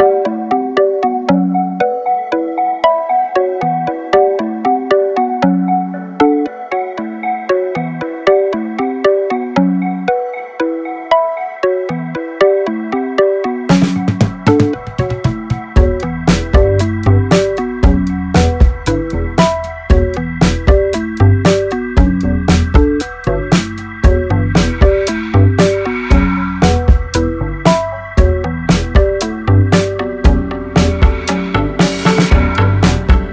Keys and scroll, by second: 0.7 ctrl+r, 1.0 Escape, 2.7 ctrl+e, 4.3 ctrl+e, 6.0 ctrl+e, 8.2 ctrl+e, 10.7 ctrl+e, 11.8 ctrl+e, 13.3 ctrl+e, 14.8 ctrl+e, 17.3 ctrl+e, 22.3 ctrl+r, 22.5 Escape, 23.0 ctrl+e, 24.7 ctrl+e, 29.1 ctrl+e, 30.3 ctrl+e.